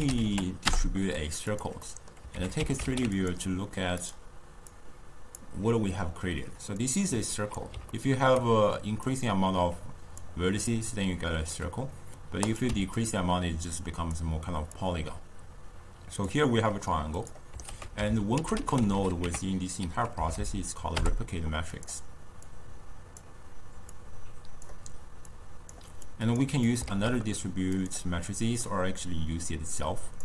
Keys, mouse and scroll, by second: 1.8 middle click, 2.3 ctrl+a, 4.7 drag, 6.8-7.9 drag, 7.9-9.1 ctrl+middle drag, 9.1-12.2 drag, 12.5 click, 13.8 click, 14.8-17.3 drag, 17.7 ctrl+a, 20.4 Down, 22.5 drag, 23.9 drag, 25.3 click, 26.0 click, 26.7 click, 27.3 shift+d, 29.5 drag.